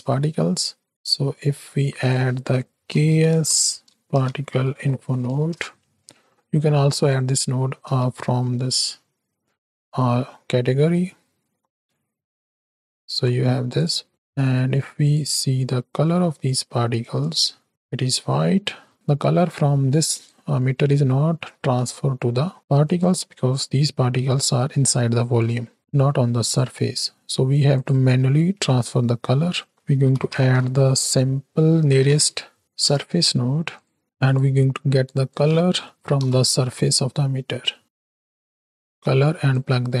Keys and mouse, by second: 0.9 shift+a, 7.5 middle click, 7.9 shift+a, 13.7 click, 17.3 ctrl+shift+click, 17.7 middle click, 18.7 middle click, 19.9 click, 22.8 click, 26.3 click, 27.6 click, 28.1 click, 28.1 middle click, 28.1 right click, 29.5-33.8 drag, 32.0 Down, 32.6 Down, 34.0 click, 35.0-37.8 drag, 38.0 click, 39.4-40.0 drag.